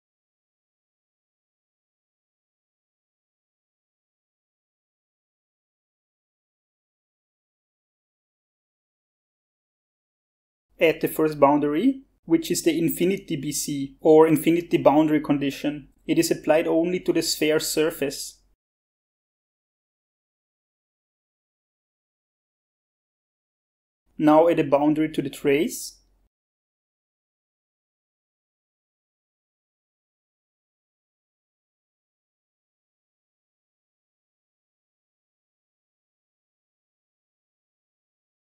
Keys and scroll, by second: 6.2-7.1 typing, 16.5-19.0 typing, 29.6-34.2 typing.